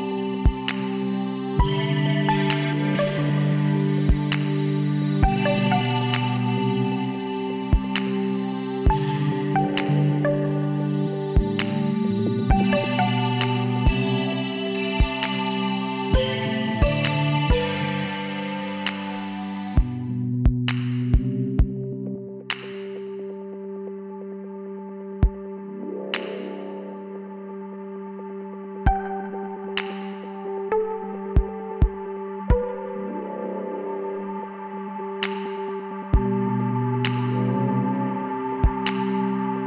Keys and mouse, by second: 2.9-5.0 middle drag, 4.1 e, 5.7 e, 8.8 middle click, 9.2-11.1 drag, 10.3 l, 11.4 KP_7, 15.4-16.7 middle drag, 16.7-18.5 drag, 19.3 z, 20.3-22.0 drag, 23.2-24.9 drag, 24.0 l, 25.5-27.1 drag, 28.8 middle click, 29.3 z, 32.1-33.8 drag, 34.2-36.5 middle drag, 38.4 alt+h, 39.1 a.